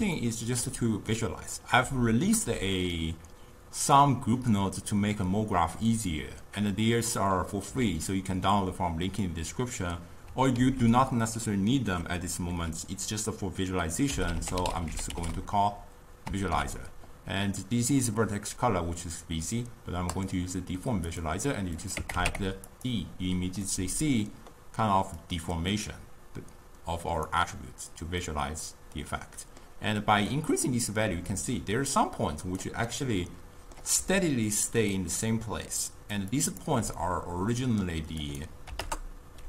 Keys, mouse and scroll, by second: 0.2-3.0 ctrl+middle drag, 3.0-6.0 drag, 10.6 ctrl+a, 21.8-23.8 drag, 23.8-25.3 middle drag, 25.3-28.3 drag, 28.3-30.3 middle drag, 30.3-32.9 drag, 32.9-34.1 middle drag, 34.1-36.7 typing, 34.6 click, 35.0 click, 35.9 click, 36.4 click, 37.0-38.3 middle drag, 38.3-39.4 drag.